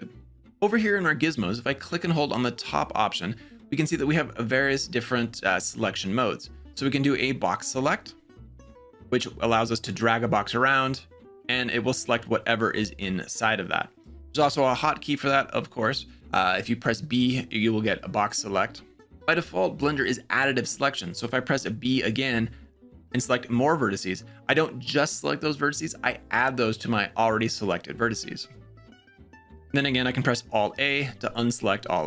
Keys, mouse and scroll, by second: 1.8-7.7 drag, 9.0-11.0 drag, 16.2 b, 21.4 b, 30.6 alt+a.